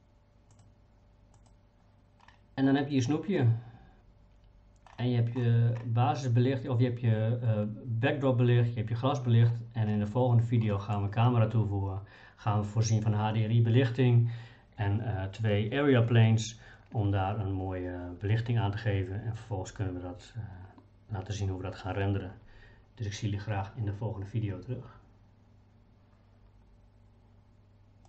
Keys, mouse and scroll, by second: 0.5-2.2 drag, 10.7 middle click.